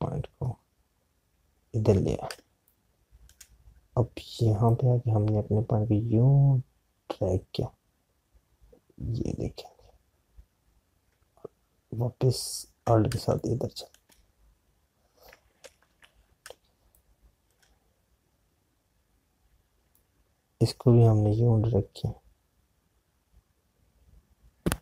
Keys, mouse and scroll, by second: 3.2 space, 6.2 click, 14.9 space, 17.7 space, 21.3 click.